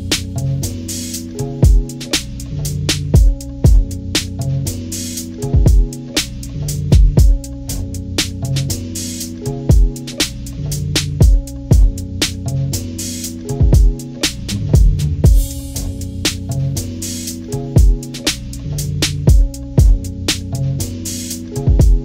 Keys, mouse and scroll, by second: 0.3 click, 0.6-3.4 drag, 3.8 ctrl+scroll down 2, 4.0 ctrl+=, 4.4 click, 4.9 click, 5.2 click, 5.9 click, 6.7-7.7 drag, 7.7 ctrl+-, 8.7 scroll up 2, 8.9 ctrl+=, 8.9 ctrl+scroll down 2, 9.4-10.5 drag, 10.5 ctrl+-, 10.7 scroll down 2, 11.6 click, 12.0 click, 12.5 click, 14.3 ctrl+-, 14.9 ctrl+-, 15.5 scroll down 2, 17.6 click, 18.4-21.0 drag, 21.4 click.